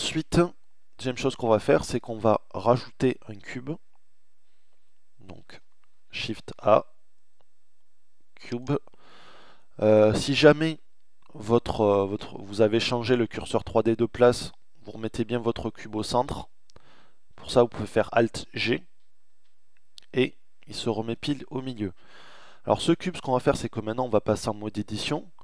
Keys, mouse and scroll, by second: 5.5 shift+a, 17.8 alt+g.